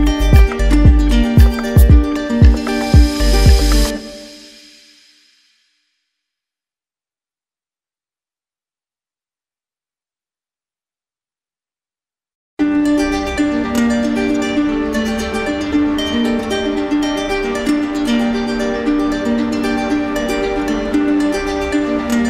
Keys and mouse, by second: 11.2-12.3 drag, 13.5-14.6 drag, 17.6-18.7 drag, 19.2-20.2 drag.